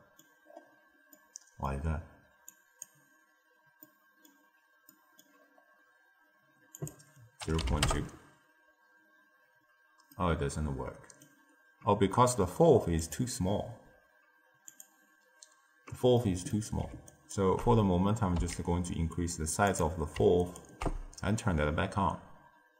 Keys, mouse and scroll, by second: 0.4-1.1 scroll up 3, 1.1-2.5 middle drag, 2.5 click, 3.7-5.4 middle drag, 5.4-6.7 scroll up 1, 6.7 click, 10.0-14.3 middle drag, 14.3 click, 14.6 click, 16.1-17.0 middle drag, 17.0 ctrl+alt+right click, 18.3 s, 20.3 ctrl+alt+right click.